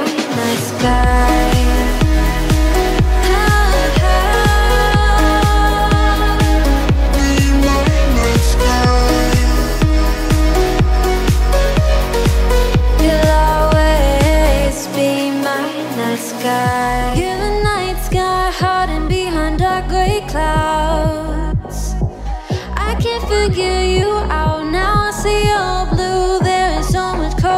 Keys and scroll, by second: 4.1 Right, 6.5 Left, 24.7 Right, 27.3 Right.